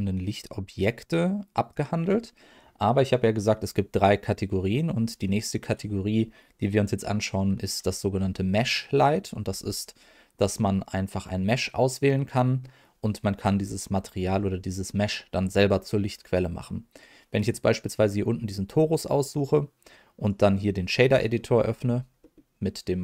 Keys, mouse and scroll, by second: 1.7 click, 5.2 middle click, 8.1 scroll up 1, 8.9 middle click, 9.4 scroll up 2, 10.3-11.1 scroll down 1, 11.1 middle click, 17.3 click, 20.2 click, 21.3 middle click, 21.7-23.0 scroll up 2, 22.2 middle click.